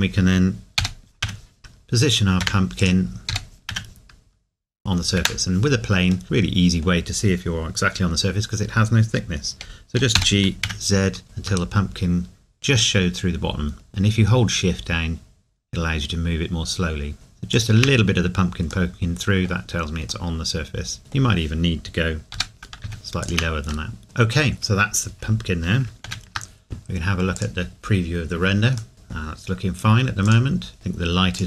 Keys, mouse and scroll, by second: 0.8 g, 2.4 Escape, 3.3 g, 5.2 Escape, 6.2 middle click, 10.1 g, 17.5 shift+click, 18.9 middle click, 22.3 g, 23.2 shift+click, 23.9 middle click, 24.0 scroll down 1, 25.9 scroll up 1, 28.9 middle click, 29.2 scroll down 1, 30.3 click.